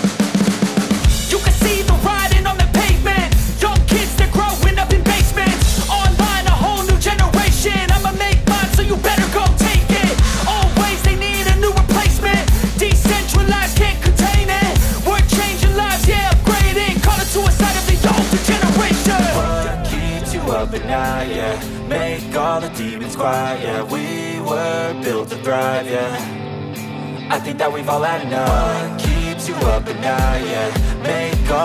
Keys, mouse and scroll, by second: 20.4 space, 26.4 ctrl+z, 28.7 space.